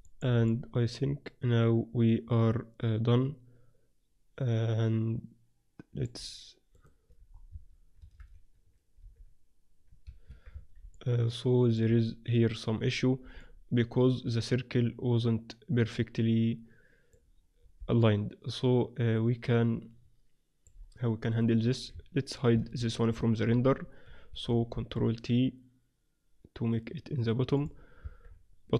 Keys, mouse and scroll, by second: 3.0-5.1 middle drag, 6.8 right click, 7.4 Tab, 7.4-8.5 drag, 8.0 a, 8.2 a, 8.5-10.5 middle drag, 9.0 s, 10.5 Tab, 10.9-12.6 middle drag, 12.6-13.8 drag, 13.8-15.2 middle drag, 15.5-19.8 middle drag, 21.2 right click, 22.0 Tab, 22.5 a, 22.7 a, 23.0 middle click, 23.4 ctrl+r, 24.1 Escape, 24.7 ctrl+t, 28.1 Tab, 28.2-28.7 middle drag.